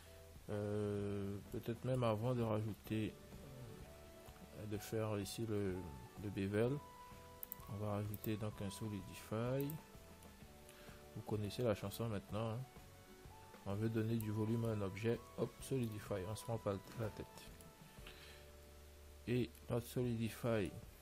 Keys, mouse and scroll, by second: 1.2 Tab, 3.9-6.9 middle drag, 6.0 Tab, 7.7-10.2 drag, 12.2 middle click, 15.4-18.7 middle drag, 19.9-21.0 middle drag.